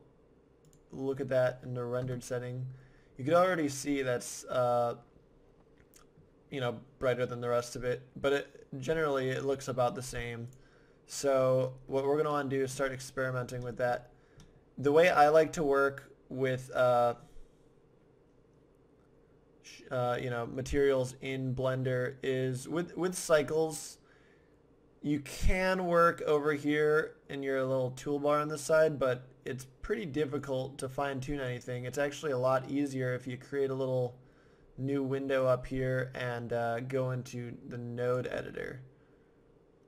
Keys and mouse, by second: 1.1 click, 1.3 middle click, 2.1 KP_0, 3.0-5.0 middle drag, 10.4-12.5 drag, 12.5-17.1 middle drag, 30.4 click.